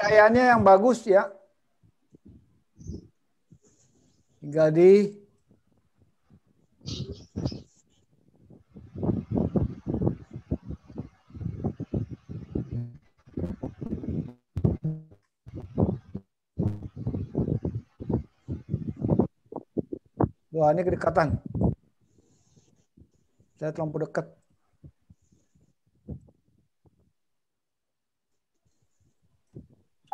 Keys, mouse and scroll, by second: 3.6 click, 7.1 click, 8.8 click, 10.4 click, 25.9 middle click, 30.0 click.